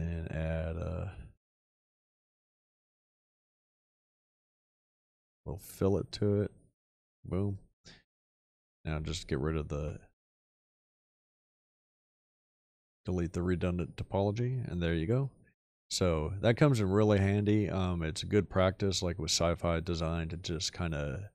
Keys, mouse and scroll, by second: 9.8 f.